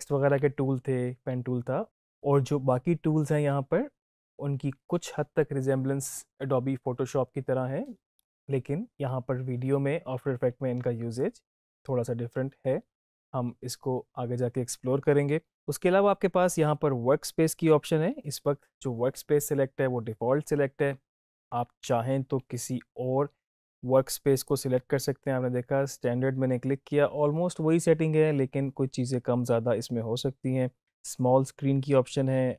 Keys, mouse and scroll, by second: 24.3 click, 30.8 click.